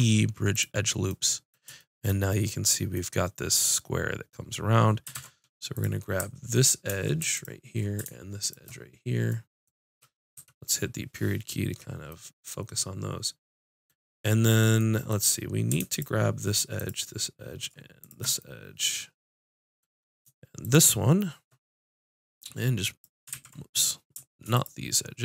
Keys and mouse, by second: 5.1 ctrl+Tab, 7.3-10.1 drag, 10.3 KP_Decimal, 15.9-18.0 drag, 18.4-20.8 drag, 21.3-24.2 drag, 23.3 ctrl+z, 24.5-25.2 drag.